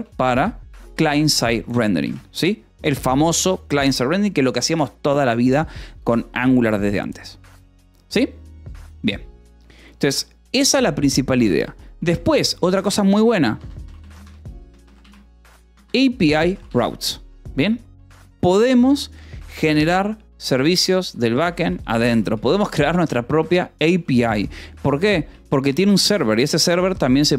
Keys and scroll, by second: 1.4 shift+c, 1.8 shift+s, 1.9 Escape, 12.1 shift+;, 12.2 space, 13.4 shift+Right, 13.9-16.2 typing, 16.6 Escape, 21.0-22.7 typing, 24.3-25.6 typing, 26.1 Escape, 26.7 k.